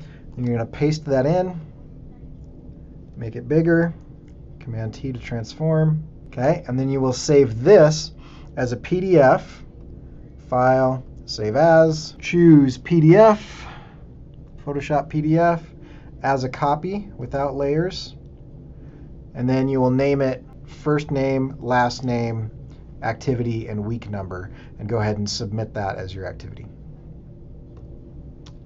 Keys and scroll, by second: 0.3 super+v, 3.6 super+t, 4.3 shift+super+t, 7.7 Return.